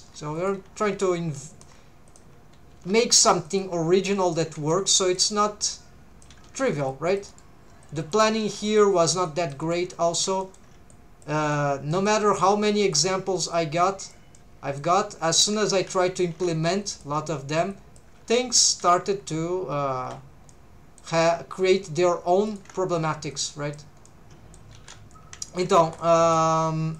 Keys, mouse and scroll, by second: 0.0 shift+v, 0.4 shift+click, 0.9 shift+v, 1.5 shift+click, 2.1 click, 2.8 g, 3.4 shift+click, 4.1 g, 4.3 shift+click, 4.6 c, 5.2 right click, 5.7 click, 6.5 alt+a, 7.3 right click, 7.8 click, 8.4 alt+a, 8.7 middle click, 9.0 c, 9.6 right click, 9.7 middle click, 10.1 scroll down 1, 10.4 shift+middle click, 10.9 click, 11.5 middle click, 12.3 middle click, 12.8 click, 13.5 click, 14.3 middle click, 16.3 a, 16.5 c, 17.2 right click, 17.7 click, 18.4 middle click, 19.0 scroll down 1, 19.7 scroll down 1, 20.0 3, 20.5 middle click, 22.5 alt+shift+click, 23.3 click, 24.0 middle click, 24.8 alt+a, 25.5 shift+middle click, 25.8 1, 26.0 middle click.